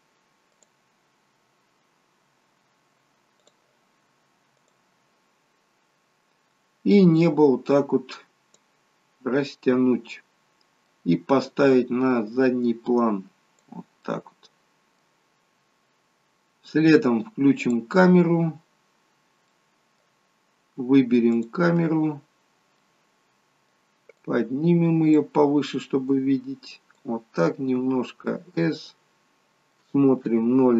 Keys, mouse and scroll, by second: 7.2 click, 9.7 middle click, 11.7 click, 14.1 middle click, 15.3-15.7 scroll up 4, 17.8 click, 19.5 middle click, 21.4 click, 22.8 middle click, 24.2 click, 26.1 click, 27.8 s, 30.3 KP_0.